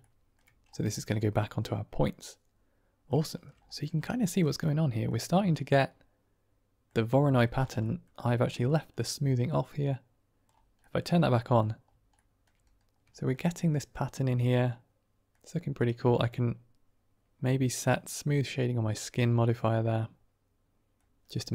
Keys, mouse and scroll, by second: 0.8 shift+middle drag, 1.1-3.0 middle drag, 3.1 shift+middle drag, 4.1 shift+middle drag, 4.6-5.1 middle drag, 5.6-6.8 middle drag, 7.8 middle click, 8.3 middle click, 9.4 click, 10.7-11.5 middle drag, 12.0 shift+middle drag, 13.1 shift+middle click, 13.3-15.2 middle drag, 15.7 right click, 18.2 click, 19.4-19.8 middle drag, 19.8 click, 20.0 middle click, 20.2 drag, 20.4-20.9 middle drag, 21.2 middle drag.